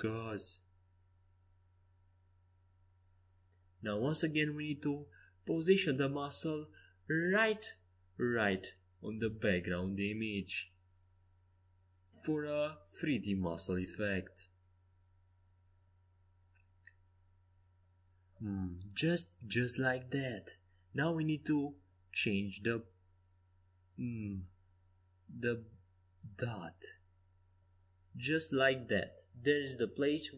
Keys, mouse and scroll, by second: 4.6 g, 6.8 r, 8.9 a, 9.6 c, 16.8 g, 19.5 a, 21.6-23.7 drag, 22.8 c, 25.1 g, 29.4 a.